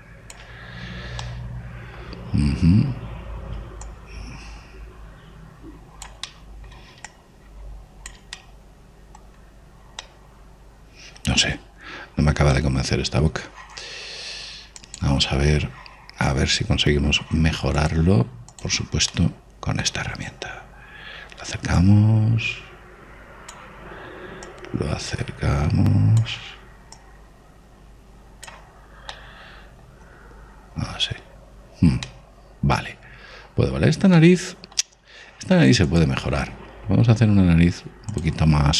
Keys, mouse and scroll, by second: 2.0-4.6 middle drag, 4.6 click, 7.1-8.9 middle drag, 7.9-9.6 drag, 9.1-15.3 middle drag, 18.6 click, 20.3-22.6 middle drag, 22.6 click, 25.3 click, 27.8 click, 29.9-32.4 middle drag, 32.9-36.7 middle drag, 36.7 click.